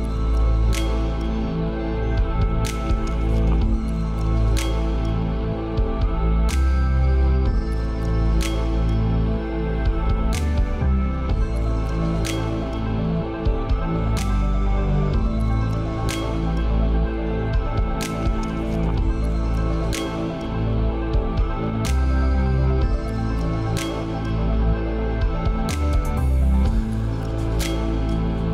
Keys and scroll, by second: 16.3 ctrl+space.